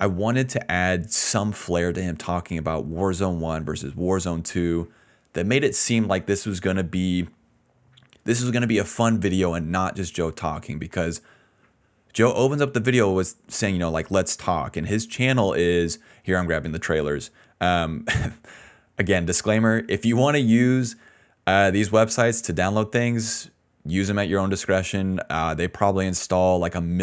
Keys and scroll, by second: 7.5-9.3 typing, 11.1-11.9 typing, 16.1 ctrl+c, 22.9-25.3 typing.